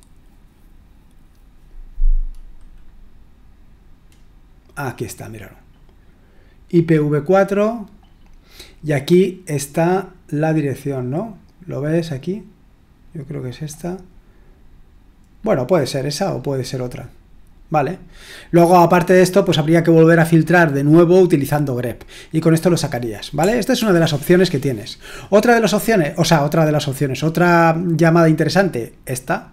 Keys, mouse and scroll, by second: 2.0-3.4 scroll down 1, 8.2-9.1 scroll down 1, 11.0-11.9 scroll down 1, 13.0 click, 14.0-14.4 scroll up 1, 14.4-15.4 scroll down 2, 15.4-16.3 scroll up 2, 16.3-16.8 scroll down 2, 16.8-17.3 scroll up 2, 17.3 scroll up 1, 17.3-17.7 scroll down 2, 17.7-18.6 scroll up 2, 23.1 click, 23.7 ctrl+l, 27.9-29.5 drag.